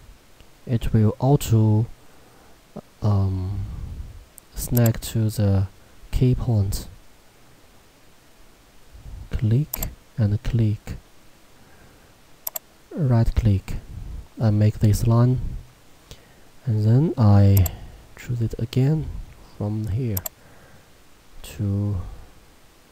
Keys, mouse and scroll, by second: 4.8 click, 9.8 click, 12.5 right click, 17.6 click.